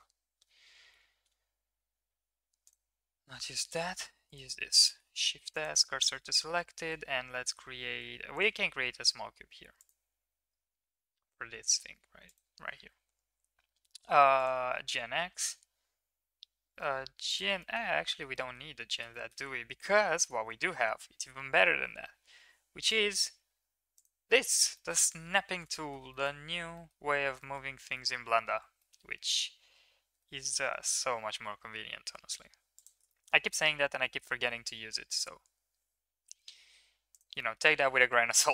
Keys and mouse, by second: 0.6 Tab, 0.9 Tab, 2.1 Tab, 3.7 Tab, 5.1 shift+s, 6.0 Tab, 6.8 shift+a, 8.8 s, 10.2 s, 12.6 g, 15.4 g, 17.6 middle drag, 18.2 middle click, 18.4 middle click, 19.2 shift+middle click, 20.2 middle click, 24.9 middle click, 25.8 shift+middle click, 26.7 middle click, 27.5 shift+middle click, 28.1 middle click, 28.8 middle click, 33.2 shift+middle click, 33.4 middle click, 34.2 middle click, 34.3 s, 37.5 middle click.